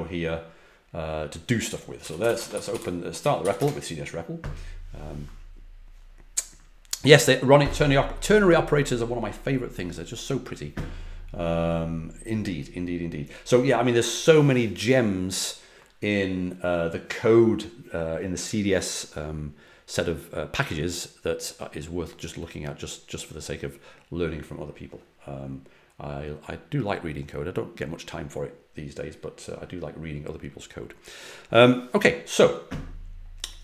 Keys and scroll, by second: 1.7-3.9 typing.